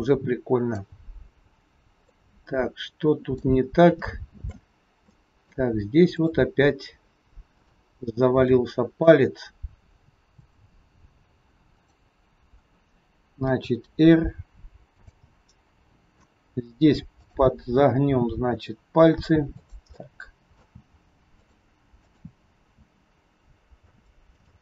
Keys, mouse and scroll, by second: 1.3-2.0 scroll down 1, 2.0 middle click, 3.7 scroll up 4, 4.0 shift+middle click, 5.1 middle click, 6.1 click, 7.4 click, 8.4 middle click, 10.3 click, 11.7 click, 13.3 r, 15.2 middle click, 15.2 scroll up 1, 17.2 click, 18.2 r, 19.9 middle click, 20.7 r, 21.9 click, 22.6 r, 24.3 middle click.